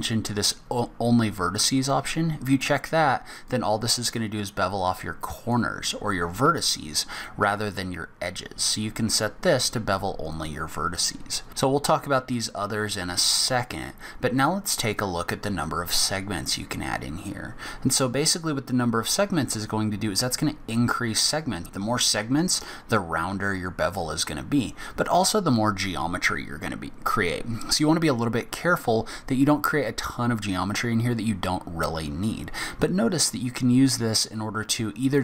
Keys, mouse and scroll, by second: 1.6 click, 3.5 click, 10.3 click, 17.9 click, 19.3 click, 21.2 click, 21.7 click, 33.9 click.